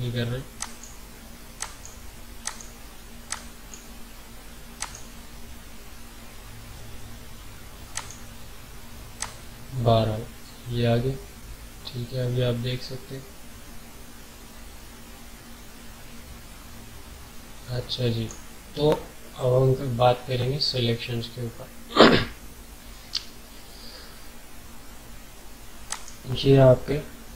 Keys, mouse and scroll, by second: 0.6-4.8 drag, 7.9-19.2 drag, 25.9 right click.